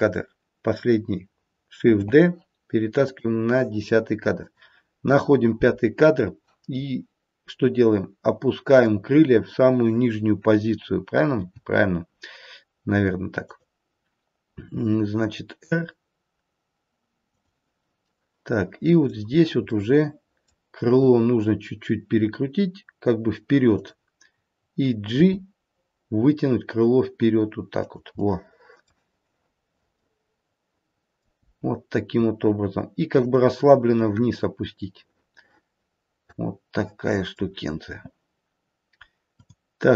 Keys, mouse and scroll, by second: 1.8 shift+d, 4.4 click, 8.7 click, 8.7-10.5 scroll down 1, 11.4 g, 14.7 r, 18.0 middle click, 18.7 middle click, 20.9 r, 25.0 g, 28.0 middle click, 28.2 middle click, 29.4-29.9 scroll down 1, 29.9 middle click, 31.4 g, 34.0 middle click, 34.5 middle click, 35.7 middle click, 36.3 middle click, 39.1 click.